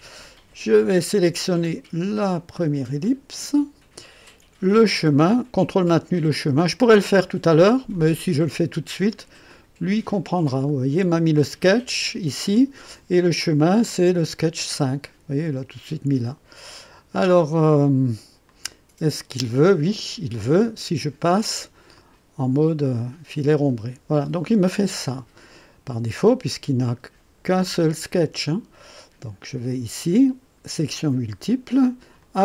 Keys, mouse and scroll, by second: 0.3-1.4 drag, 2.5 click, 7.6 ctrl+click, 9.5 click, 18.4-19.8 drag, 21.9 click, 22.9-24.5 drag, 29.5 click, 30.7 click, 32.2 click.